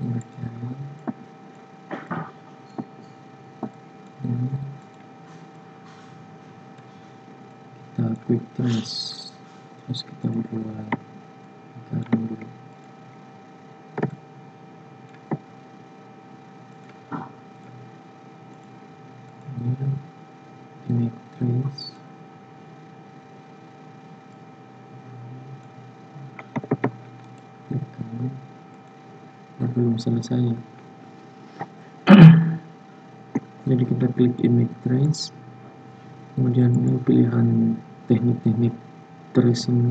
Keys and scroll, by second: 26.7 ctrl+z, 32.2 ctrl+z.